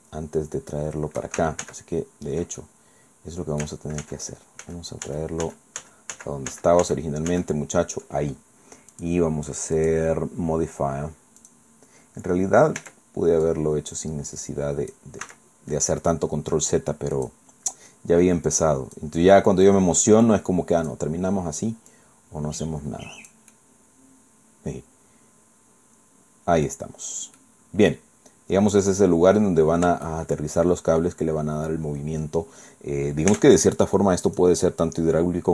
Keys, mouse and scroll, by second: 1.6 ctrl+shift+z, 2.6-3.8 ctrl+drag, 4.0 ctrl+z, 8.9 click, 9.5 click, 11.4 click, 12.8 Tab, 13.4-15.1 drag, 15.2 s, 17.2 click, 18.5 click, 19.5-21.1 drag, 21.9-23.5 drag, 23.5-26.8 middle drag, 27.4-29.0 drag, 30.0 shift+click, 30.8-31.4 shift+scroll down 1, 33.3 Tab, 34.3 click.